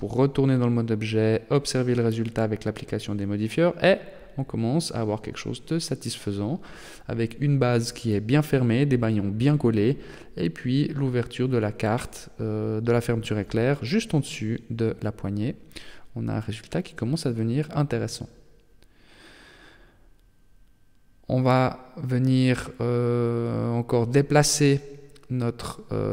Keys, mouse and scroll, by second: 0.1 g, 2.0 Tab, 2.6-3.2 scroll down 4, 3.6 middle click, 8.3-9.4 scroll down 7, 9.4-10.2 scroll up 2, 10.2 middle click, 11.3 KP_0, 14.2 middle click, 15.3 KP_0, 17.4 right click, 18.9 middle click, 20.3-20.8 scroll up 8, 21.2 shift+middle click, 22.0 right click, 22.7 middle click, 25.0 middle click.